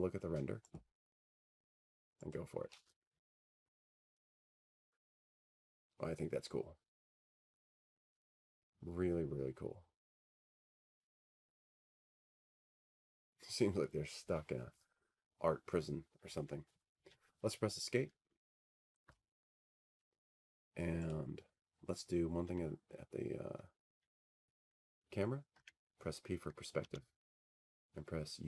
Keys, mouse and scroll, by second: 0.7 F3, 2.7 click, 6.3 click, 8.0 click, 9.9 click, 24.6 Escape, 26.8-28.4 drag.